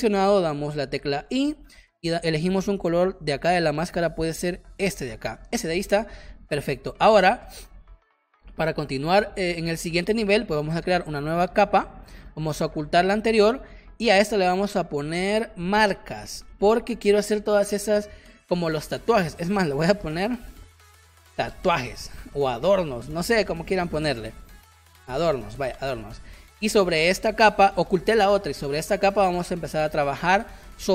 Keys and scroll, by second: 1.2 i, 5.6 v, 16.3 Caps_Lock, 16.4-17.1 typing, 19.8 BackSpace, 20.7 Caps_Lock, 20.9-22.5 typing, 23.4 Caps_Lock, 23.7-25.2 typing, 25.7 Return, 30.3 space.